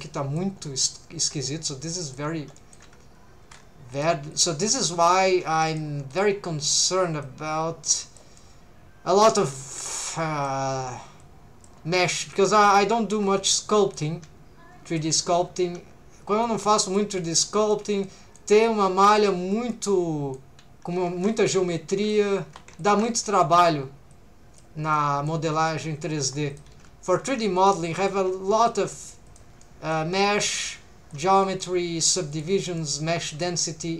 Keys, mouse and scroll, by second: 0.6 scroll down 2, 0.9-2.2 middle drag, 2.6 middle click, 3.9 click, 4.3 shift+click, 4.8 shift+click, 5.6 shift+middle click, 6.1 shift+click, 7.2 click, 8.4-10.5 middle drag, 11.2 click, 11.9 middle click, 12.6 alt+a, 13.1 3, 13.6 middle click, 14.9 alt+shift+click, 15.2-15.6 scroll down 2, 16.4 click, 17.2 middle click, 18.0 middle click, 18.6 middle click, 19.5 scroll up 1, 19.7-20.7 typing, 19.7 middle click, 21.7 middle click, 22.5 3, 22.8 alt+shift+click, 24.1 click, 24.9 middle click, 25.6 alt+a, 26.2 1, 26.5 click, 26.7 g, 27.1 shift+click, 27.6 click, 27.7 g, 28.0 shift+click, 28.7 click, 28.9 g, 29.3 shift+click, 29.6 middle click, 30.2 middle click, 31.1 right click, 31.1 click, 31.4 middle click, 32.3 shift+click, 32.8 middle click, 33.3 click.